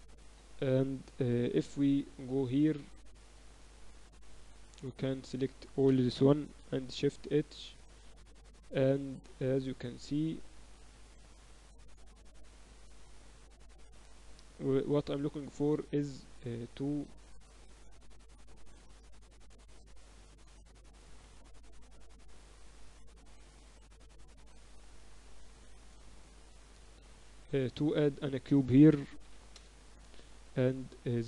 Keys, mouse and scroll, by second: 1.4 KP_3, 1.9 z, 2.9 z, 3.9-6.1 right drag, 6.6 shift+h, 7.1 z, 9.0 a, 10.4 click, 10.8-11.8 middle drag, 11.8 click, 12.7 middle click, 13.3 right click, 14.7-17.1 typing, 18.3 KP_1, 19.5 z, 20.5 a, 21.3 b, 22.3 click, 24.1 KP_3, 25.9 a, 26.5-28.1 drag, 26.6 shift+a, 29.1 s, 31.1 Tab.